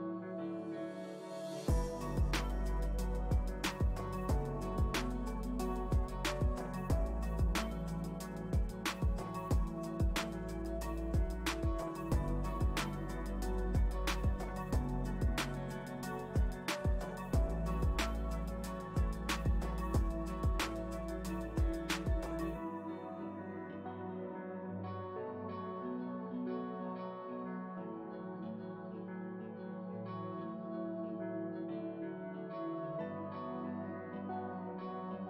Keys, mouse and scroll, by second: 0.2-2.0 drag, 2.0 middle click, 2.6-6.4 drag, 6.4 middle click, 7.3-8.8 drag, 8.8-9.8 ctrl+middle drag, 9.8 f, 10.5-19.0 drag, 19.0 middle click, 19.8-23.3 drag, 23.3 middle click, 23.8 click, 24.4-25.8 middle drag, 25.8 click, 26.3 middle click, 26.9-29.0 drag, 29.0 middle click, 29.6-32.9 drag, 32.9-33.9 middle drag, 33.9 space, 34.5 middle click.